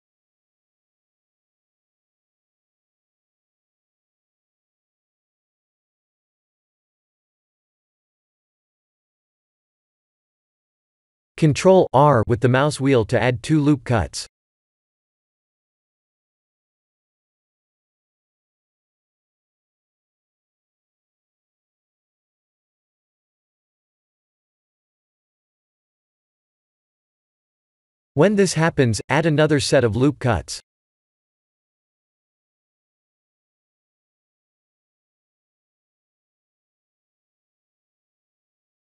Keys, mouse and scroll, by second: 1.5 Tab, 1.9 3, 2.1 click, 3.4 middle click, 3.5 middle click, 4.0 middle click, 4.7 shift+click, 5.1 middle click, 6.9 o, 11.8 ctrl+r, 15.4 click, 17.1 click, 24.0 Tab, 24.6 middle click, 24.9 Tab, 25.4 middle click, 26.0 middle click, 26.5 middle click, 28.8-30.6 scroll up 5, 31.0 click, 35.1 ctrl+r.